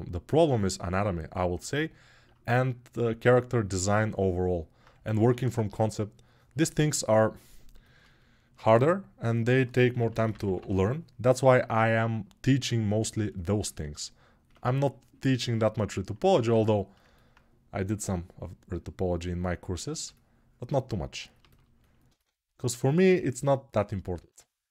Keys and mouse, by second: 5.4 ctrl+r, 8.5 1.